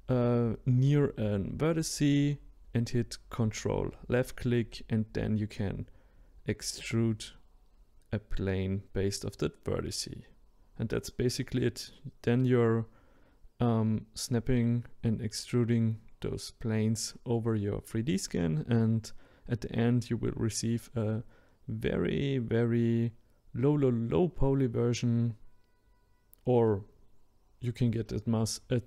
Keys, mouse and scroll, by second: 6.4-11.2 shift+middle drag, 11.7-14.8 ctrl+drag, 15.0-26.1 ctrl+drag, 26.1-28.3 middle drag, 28.3-28.8 drag.